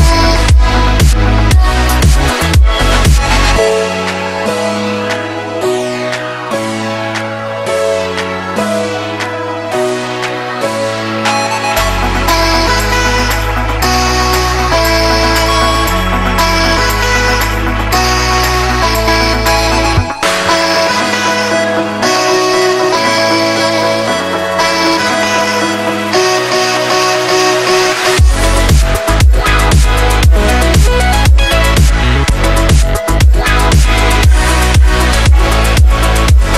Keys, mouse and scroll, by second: 1.6 space, 2.0-2.4 space, 3.5-5.4 drag, 7.1-7.8 shift+click, 8.3 space, 9.1 click, 9.8-10.2 shift+drag, 11.8 Right, 12.9 click, 14.1-14.6 shift+click, 15.0-15.8 click, 15.9 Left, 17.1 click, 17.1-20.3 drag, 19.3-20.0 click, 21.9-23.2 drag, 23.4 Left, 24.8 click, 27.7 space, 28.4 click, 29.5-30.5 alt+shift+drag, 31.1 Down, 31.5 Left, 32.1-32.5 click, 33.5 space, 33.8-35.3 drag, 35.7 space, 36.0 click, 36.2-36.5 space.